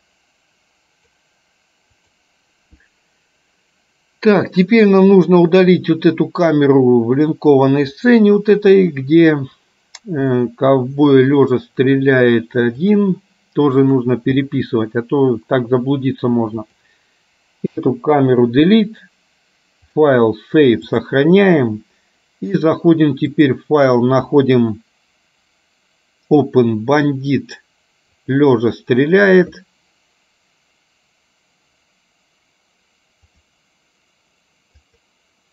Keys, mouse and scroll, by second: 5.2 click, 8.1-14.7 drag, 16.7 click, 17.8 Delete, 19.9-21.3 drag, 23.4-29.1 drag, 33.3-35.5 drag.